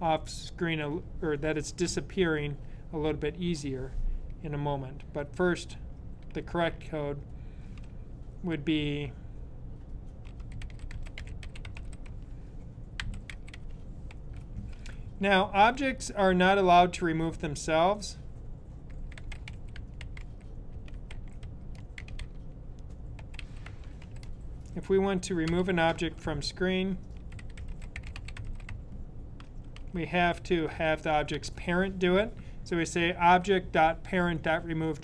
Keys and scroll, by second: 9.9-15.3 typing, 18.5-24.3 typing, 25.4 typing, 26.7-31.4 typing.